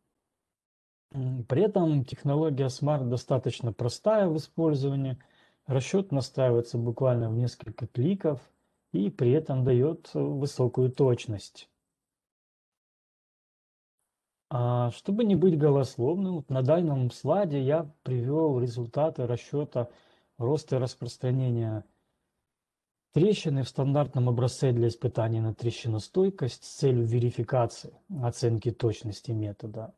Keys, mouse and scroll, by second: 11.0 right click, 11.5 right click, 12.9 right click, 13.9 scroll, 15.8-16.1 scroll down 1.